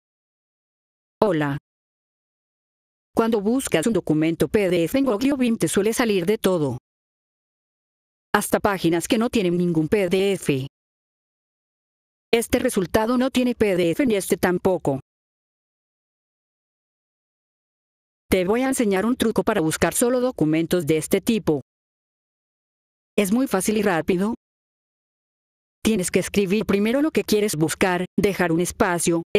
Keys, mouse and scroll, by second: 1.1 click, 11.5 ctrl+Num_Lock, 14.8 ctrl+Num_Lock, 17.3 F4, 18.2 click, 23.7 click, 25.1 F4, 25.7 click, 28.6 click.